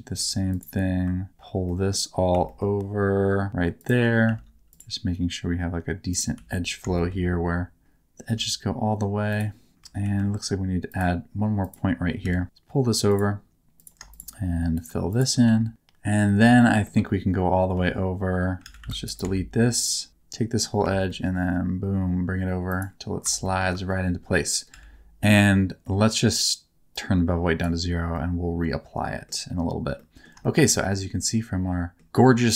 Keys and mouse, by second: 0.1 1, 1.7 middle click, 2.3 e, 3.8 click, 4.8 2, 6.4 f, 7.0 shift+middle click, 8.3 1, 10.0 ctrl+r, 12.1 g, 12.2 g, 13.1 click, 13.8 click, 14.8 shift+click, 15.5 f, 16.6 middle click, 17.7 a, 18.6 alt+a, 18.8 c, 19.0 right click, 19.2 x, 20.8 e, 21.1 middle click, 22.7 click, 23.4 middle click, 23.9 middle click, 24.7 a, 27.0 click, 28.1-29.3 middle drag, 30.0 middle click, 30.4 shift+middle click, 30.8-32.0 middle drag, 32.2-32.5 middle drag.